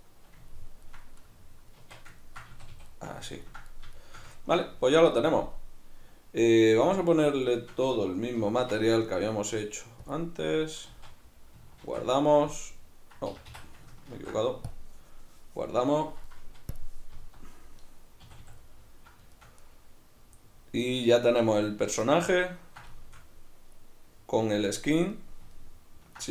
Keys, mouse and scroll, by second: 1.8 Tab, 2.5 a, 6.9 a, 7.5-8.5 shift+right drag, 8.5 ctrl+l, 10.9 z, 11.9 ctrl+a, 13.4 Escape, 14.1 ctrl+s, 16.8 click, 17.2 z, 18.7-26.3 middle drag.